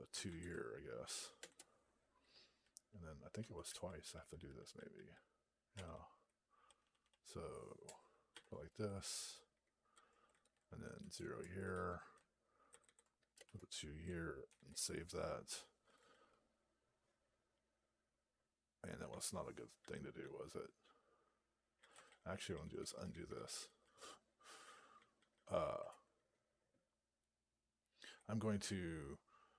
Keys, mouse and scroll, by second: 0.0 ctrl+d, 1.3 2, 2.5 Down, 11.0 space, 11.6 alt+f, 12.6 ctrl+d, 13.3 2, 14.4 ctrl+s, 15.8 ctrl+a, 21.9 ctrl+/, 25.5 ctrl+a.